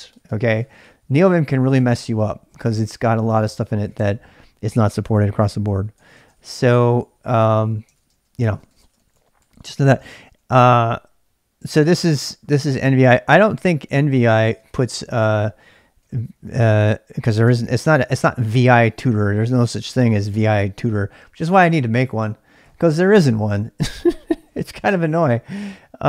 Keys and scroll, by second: 0.0-4.4 typing, 1.0 Up, 1.2 Up, 2.5 Down, 5.9-10.1 typing, 11.4-16.6 typing, 17.4 Tab, 17.5 Tab, 18.8-20.4 typing.